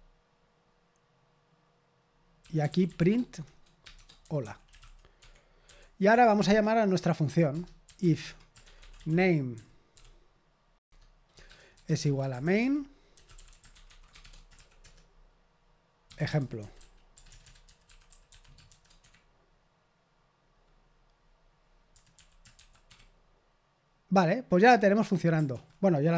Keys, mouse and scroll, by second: 2.2-19.1 typing, 7.5 Return, 10.8 Tab, 21.6-23.0 typing.